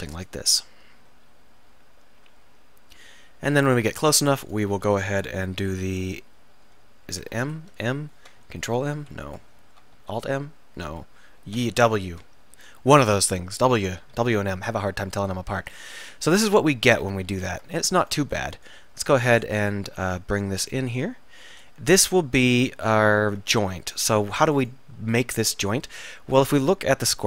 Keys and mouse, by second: 1.6 middle click, 6.3 m, 6.7 m, 7.5 Escape, 7.6 m, 8.5 ctrl+m, 9.3 Escape, 9.6 m, 11.6 w, 15.8 middle click, 16.5-17.5 middle drag, 17.5 ctrl+r, 18.2-20.7 drag, 22.0 click, 22.5 ctrl+z, 23.0 ctrl+z, 24.6-25.9 drag.